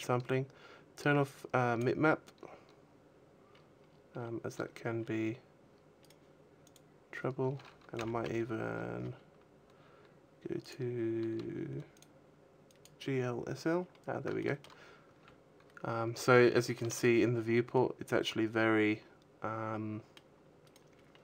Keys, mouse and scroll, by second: 2.0 click, 3.3-5.8 scroll up 15, 5.8 right click, 5.8 scroll up 5, 6.4 click, 7.8 n, 8.2-9.1 scroll down 14, 10.4 click, 11.6 click, 13.6-15.2 scroll up 7, 14.1 shift+middle click, 14.8 a, 15.7-16.1 scroll up 1, 16.1 shift+middle click, 17.5 middle click, 20.4 right click.